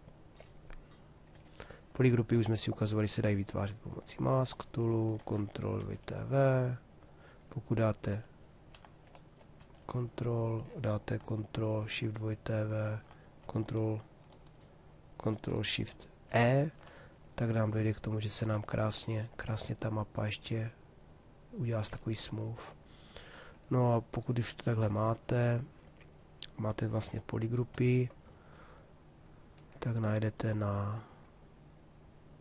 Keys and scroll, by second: 11.7 ctrl+shift+w, 15.9 ctrl+shift+e, 26.6 shift+f.